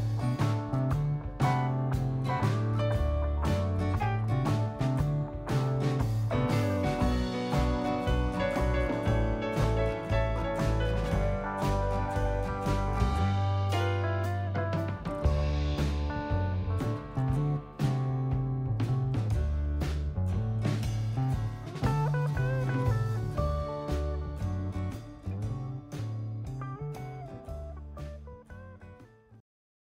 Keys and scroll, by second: 6.0 super+0.